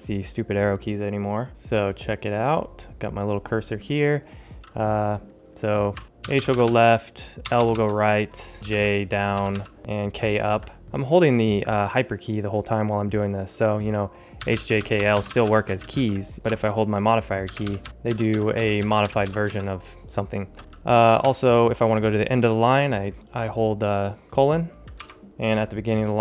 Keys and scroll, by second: 6.0 Left, 7.3 Right, 8.5 Down, 9.2 Up, 10.5 ctrl+alt+super+Up, 14.1-15.7 typing, 16.4 ctrl+super+h, 17.5 ctrl+alt+shift+super+Down, 17.8 ctrl+alt+shift+super+Left, 18.1 ctrl+alt+shift+super+Up.